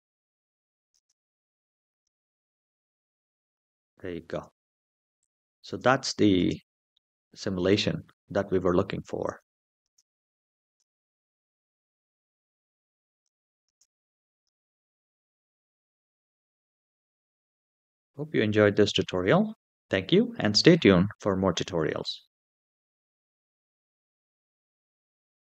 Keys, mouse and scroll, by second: 0.7 space, 1.7 space, 2.7 drag, 3.2 space, 4.1 space, 5.0 click, 5.5 space, 6.1 space, 6.7-8.0 middle drag, 9.0 click, 9.6 space, 10.4 space, 10.7-12.1 middle drag, 12.9 drag, 13.4 space, 14.1 space, 17.0 click.